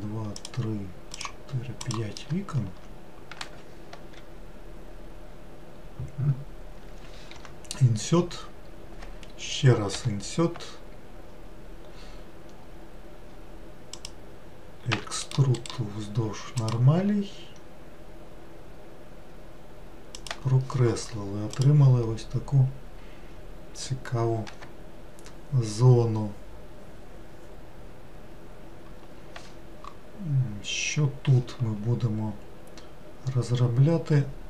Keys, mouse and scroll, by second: 0.4 shift+click, 1.2 shift+click, 1.9 shift+click, 15.0 e, 16.8-34.4 right drag.